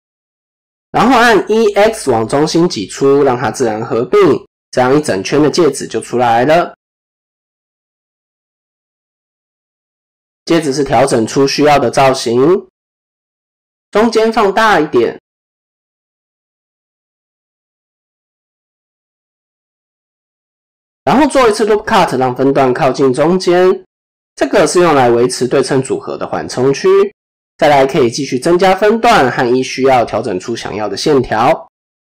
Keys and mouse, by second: 0.9 e, 4.3 middle click, 6.1 middle click, 7.3-7.8 drag, 8.0 ctrl+z, 8.6 KP_7, 10.9 shift+middle click, 11.7 click, 13.1 s, 14.9 KP_3, 16.7 s, 19.1 KP_7, 20.0 shift+middle click, 21.3 ctrl+r, 24.5 shift+middle click, 24.8 shift+click, 25.7 click, 26.9 ctrl+r, 29.2-31.2 drag, 31.6 KP_3.